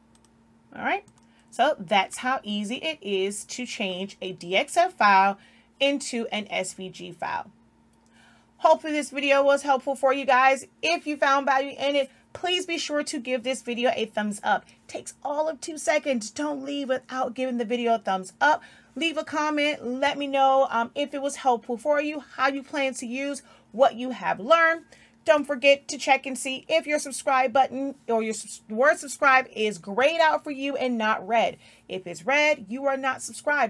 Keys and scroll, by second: 0.0 i, 2.5 i.